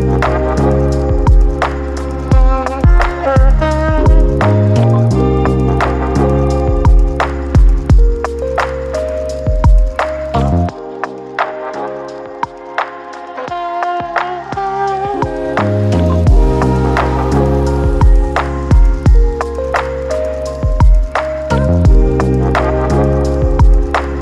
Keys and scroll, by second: 13.6 j, 17.7 Delete, 22.3 Delete.